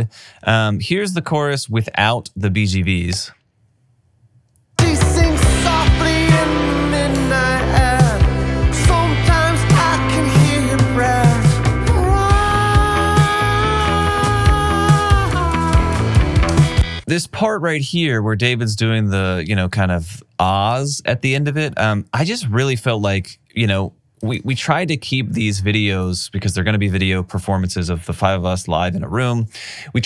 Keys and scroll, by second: 3.3 space, 16.8 space.